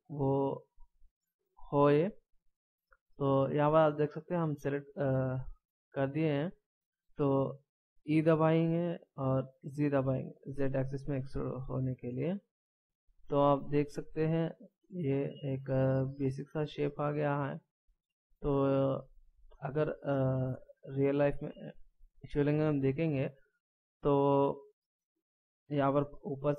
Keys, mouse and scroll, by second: 1.9 middle click, 8.2 e, 13.6 middle click, 17.6 middle click, 19.4 scroll down 1, 20.1 middle click.